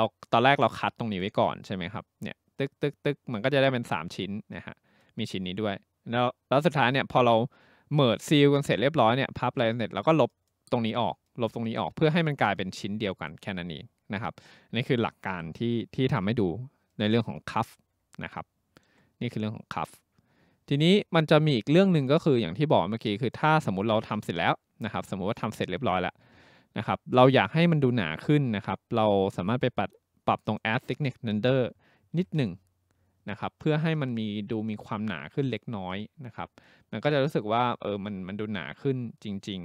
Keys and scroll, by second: 15.3 Escape, 32.1 3, 32.4 Return.